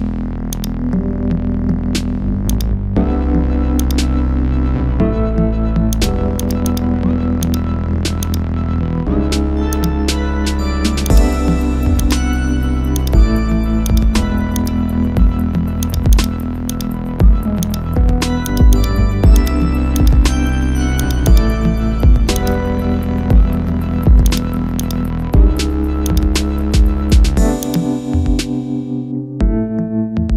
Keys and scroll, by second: 21.7 ctrl+0, 25.3 ctrl++.